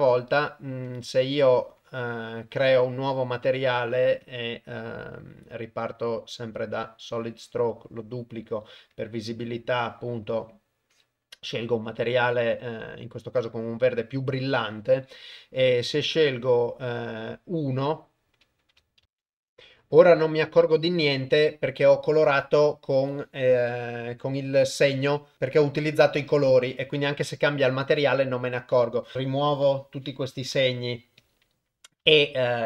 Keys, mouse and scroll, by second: 0.8 click, 1.5 click, 1.8 click, 4.3-6.9 drag, 7.7 click, 16.2 click, 29.1 Tab, 29.1 a, 30.5 x, 32.0 Tab.